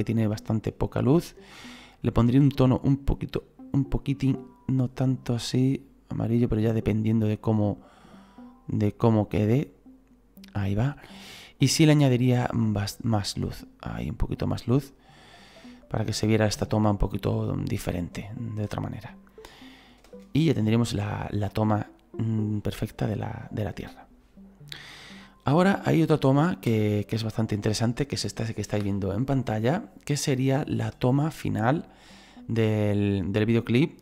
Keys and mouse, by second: 1.9 click, 3.9 click, 12.7 click, 15.8 click, 20.0 space, 26.7 space.